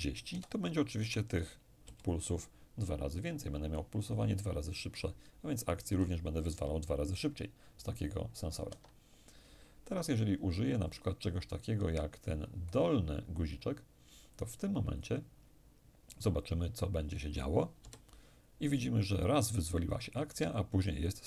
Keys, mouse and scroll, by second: 0.6 0, 1.5 Return, 5.5 p, 8.3 Escape, 14.0 click, 17.4 p.